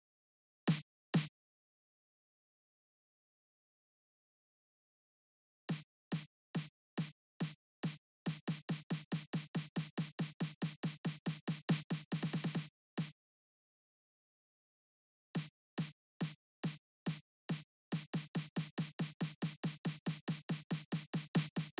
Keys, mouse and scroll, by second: 0.3 click, 0.8-2.7 drag, 5.4 click, 12.7 click, 13.6 click, 14.0 click, 15.0 space, 16.4 click, 17.6 click.